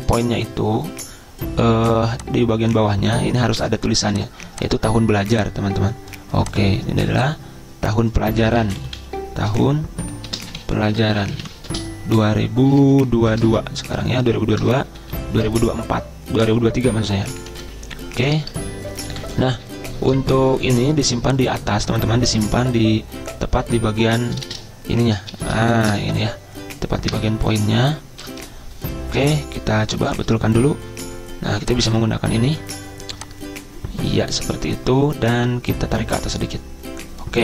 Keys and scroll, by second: 8.3-20.2 typing, 22.8 BackSpace, 23.8 BackSpace, 27.1 Return, 30.7 Return.